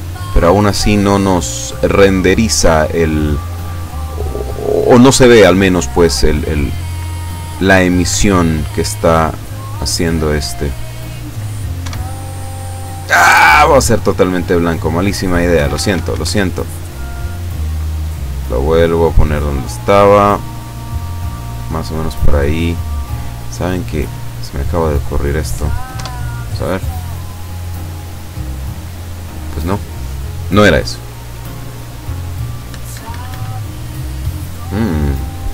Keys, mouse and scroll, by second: 8.1 Escape, 10.3-11.5 drag, 11.9 F12, 15.5 Escape, 16.9-21.9 drag, 22.0 middle click, 23.5 right click, 23.9 scroll up 1, 24.6-25.7 drag, 26.0 F12, 32.7 Escape, 33.5 right click.